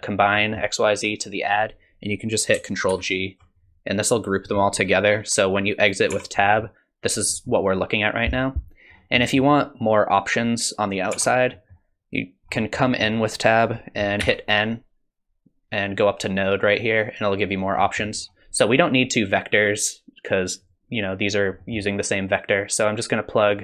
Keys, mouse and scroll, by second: 0.4 middle click, 3.0 ctrl+g, 6.1 Tab, 6.4 middle click, 7.3 middle click, 8.9 scroll up 3, 9.2 middle click, 11.1 Tab, 11.5 middle click, 12.5-13.7 scroll up 5, 12.8 middle click, 14.2 n, 16.4 click, 17.8 middle click, 18.2-19.1 scroll down 1, 19.1-19.4 scroll down 3, 20.6 click, 21.6 middle click, 22.8 click.